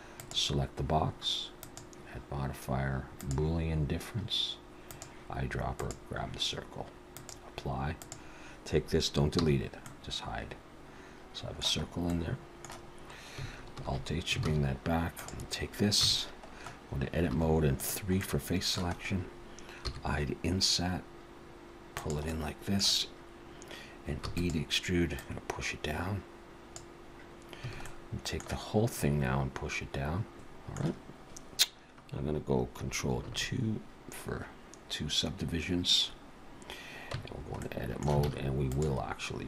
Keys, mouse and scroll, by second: 0.2 click, 1.6 click, 4.9 click, 7.2 click, 8.0 click, 9.4 h, 9.8 middle click, 11.9 scroll up 1, 12.1 middle click, 13.8 alt+h, 14.4 alt+a, 15.1 click, 16.0 Tab, 17.3 3, 17.8 click, 18.2 middle click, 18.9-19.8 scroll up 2, 19.8 i, 22.3 middle click, 24.2 e, 25.2 click, 27.7 a, 27.8 middle click, 29.0 click, 30.3 Tab, 33.3 ctrl+2, 37.1 Tab, 37.6 middle click, 38.3 alt+a, 38.7 click.